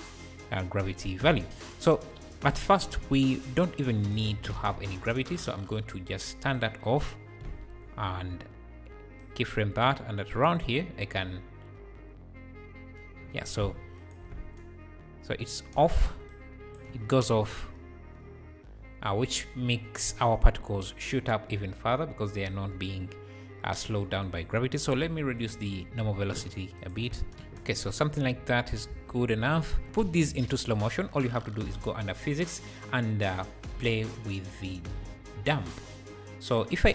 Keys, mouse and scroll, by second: 0.8-2.1 scroll down 1, 2.1-3.4 drag, 3.4-4.7 shift+right drag, 4.7-5.5 scroll down 7, 5.5-5.9 scroll down 1, 5.9-7.4 drag, 9.2-14.3 shift+right drag, 14.3 space, 15.8 space, 16.3-16.9 shift+right drag, 16.9 space, 17.6 space, 20.9-21.5 scroll up 8, 21.9-22.9 scroll up 3, 24.2-25.6 drag, 26.8 shift+right click, 27.1-29.3 typing, 29.0 alt+a, 29.9 click, 31.6-34.7 drag, 35.8-36.9 drag.